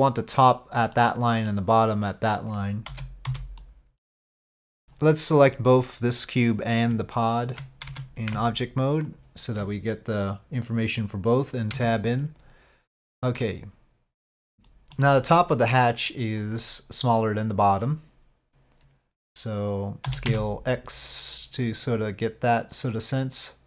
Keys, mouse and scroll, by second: 1.0 middle click, 2.9 z, 3.6 middle click, 7.9 Tab, 11.7 Tab, 12.8 middle click, 13.4 click, 13.6 middle click, 14.7 KP_5, 14.7 KP_7, 14.8 shift+click, 16.4 click, 20.1 s.